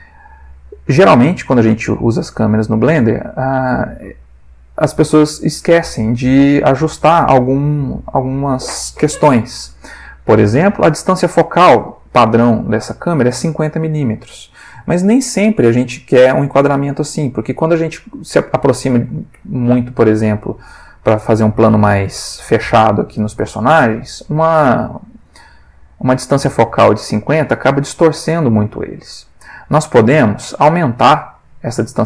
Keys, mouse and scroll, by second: 3.6 click, 17.1-18.1 ctrl+middle drag, 19.4 g, 21.3 click, 29.8-31.3 drag, 31.5-32.0 drag.